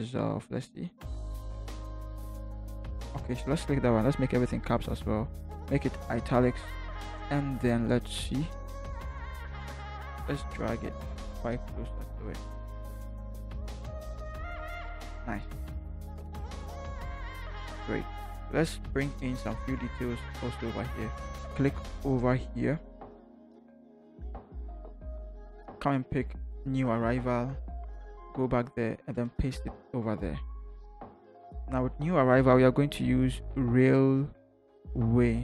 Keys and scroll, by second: 13.8 Up, 14.1 Up, 16.2 Down, 20.3 t, 27.4 ctrl+c, 29.3 ctrl+v.